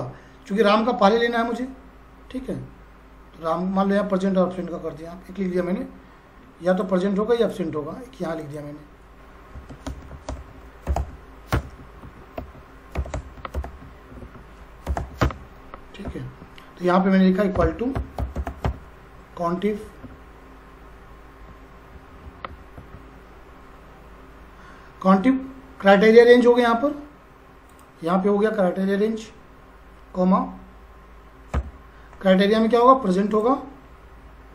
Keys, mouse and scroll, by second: 6.7 click, 9.3-15.4 typing, 11.8 Up, 12.0 Right, 16.0 Left, 17.3-19.1 typing, 22.0 Down, 22.8 Tab, 27.7 click, 31.5 ,, 33.3 click.